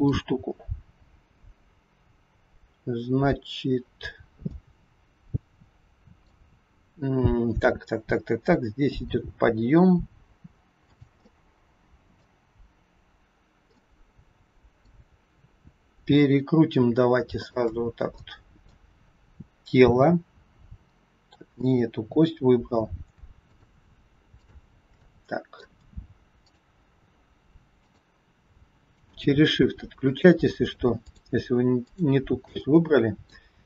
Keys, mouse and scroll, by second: 4.4 middle click, 8.8 g, 11.2 middle click, 13.7 middle click, 17.3 shift+click, 18.1 middle click, 19.9 r, 23.5 shift+click, 24.2 shift+click, 24.9 middle click, 26.3 shift+click, 27.7 shift+click, 28.8 shift+click, 29.9 shift+click, 30.9 shift+click, 31.8 shift+click, 32.6 middle click.